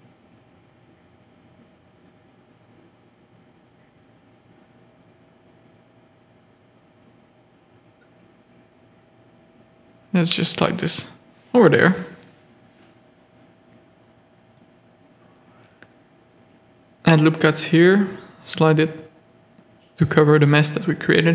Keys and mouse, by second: 0.5 Tab, 0.8 z, 1.3 alt+a, 1.7 z, 4.5 z, 4.9 shift+middle click, 5.7 Tab, 6.4 shift+middle click, 7.6 g, 9.8 Tab, 10.7 z, 11.5 z, 13.3 z, 14.7 Tab, 15.2 ctrl+r, 16.0 z, 16.2 a, 16.6 click, 16.9 z, 17.3 g, 20.3 Tab, 20.9 z.